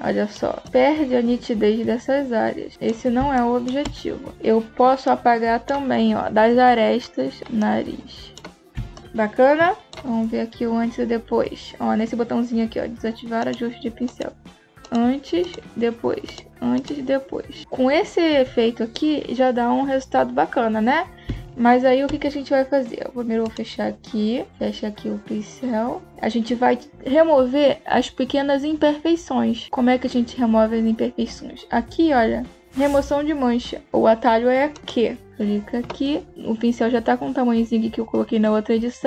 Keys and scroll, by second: 3.1 space, 8.6 space, 21.1 space.